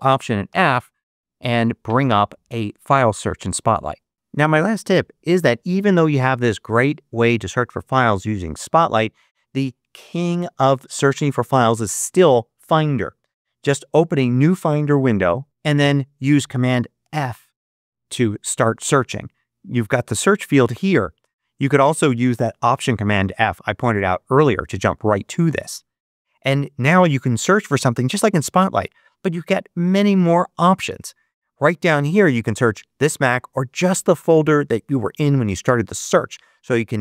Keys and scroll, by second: 1.0 ctrl+alt+super+f, 17.0 super+f.